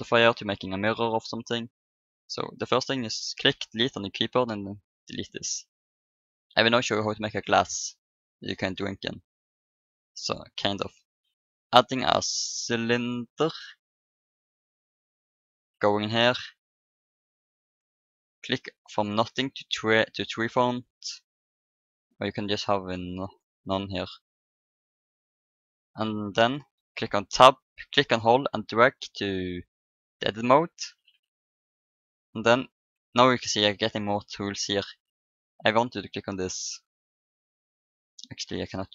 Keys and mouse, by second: 3.4 Delete, 7.2 shift+a, 15.3-17.1 drag, 16.9-18.1 middle drag, 18.1-19.9 drag, 21.4 middle click, 22.3-24.1 drag, 27.4 Tab, 35.9-37.7 drag.